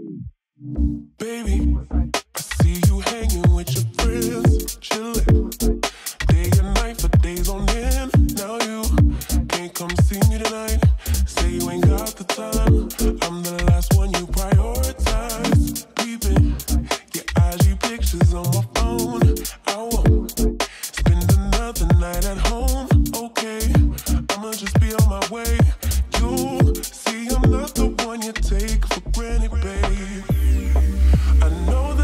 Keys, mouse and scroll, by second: 1.2-1.9 click, 8.7-9.5 click, 9.5 space, 14.0 space, 14.7 ctrl+s, 15.7-19.4 drag, 20.3 scroll up 1, 22.3 scroll down 1, 22.3 s, 23.1-25.2 drag, 25.4 scroll up 1, 25.9-26.8 middle click, 27.3 shift+r, 28.0-29.9 drag.